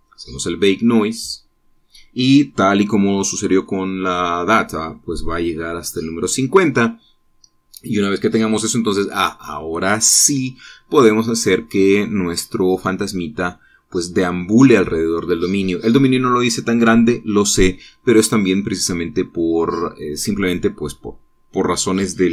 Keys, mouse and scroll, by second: 0.1 click.